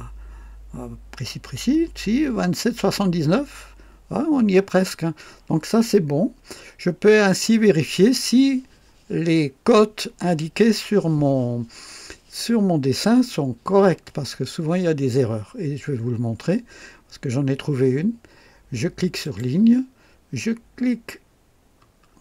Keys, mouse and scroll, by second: 7.2 Escape, 19.2 click, 22.1 scroll up 1.